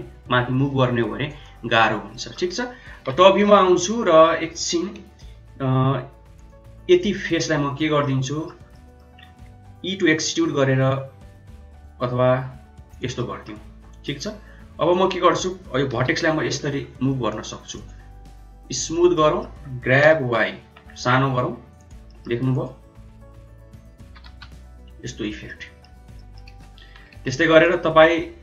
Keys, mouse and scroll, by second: 1.3-1.8 drag, 1.9 Escape, 2.0 middle click, 3.0 KP_7, 4.9 r, 6.3 click, 7.0 click, 7.9 middle click, 8.6 middle click, 10.2 e, 13.1 middle click, 13.6 Tab, 14.0 middle click, 14.3 Tab, 15.9 g, 17.2 click, 17.7-19.0 drag, 19.0 middle click, 19.8 g, 22.0 middle click, 23.9 g, 25.3 middle click, 26.1 middle click, 26.4 Tab, 27.1 Tab, 27.5 click.